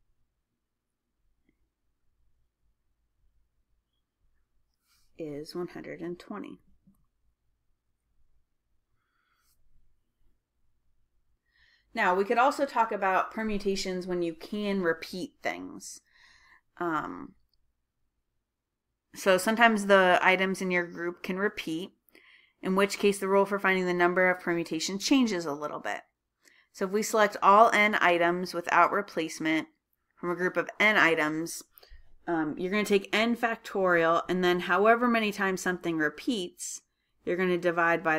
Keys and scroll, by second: 4.4 Left, 7.6-9.0 typing, 20.9-21.6 typing.